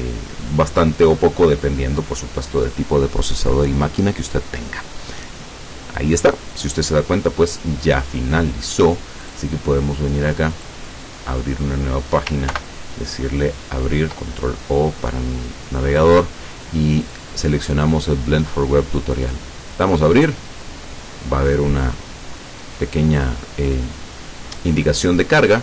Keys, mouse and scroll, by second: 10.6 click, 12.6 ctrl+o, 17.1 click, 19.9 click.